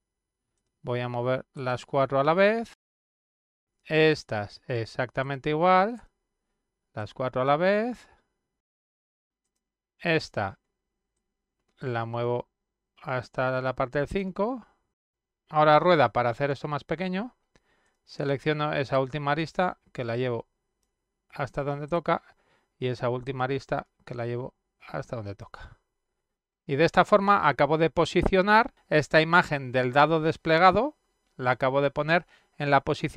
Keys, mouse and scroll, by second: 0.3-2.3 drag, 3.4 click, 4.0 shift+click, 5.0 shift+click, 5.6 shift+click, 6.4-8.9 drag, 9.8 click, 11.2-13.8 drag, 15.7 middle click, 16.9 middle click, 19.3 click, 20.2-21.7 drag, 22.6 click, 23.8-25.6 drag.